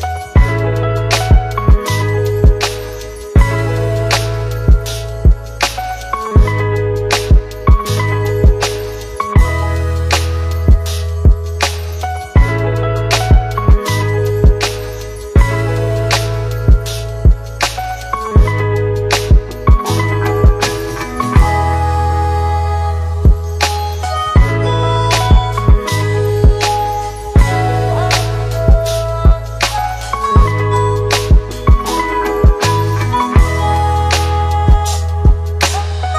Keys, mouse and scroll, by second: 4.1-5.3 click, 6.7 shift+click, 8.9 s, 10.4 click, 12.7 Return, 15.9 click, 19.1 click, 20.3 click, 22.7-23.1 scroll up 1, 23.1-25.0 middle click, 26.3 click, 31.8 click, 32.4 space, 32.6 click, 32.8-33.6 space, 34.0 click.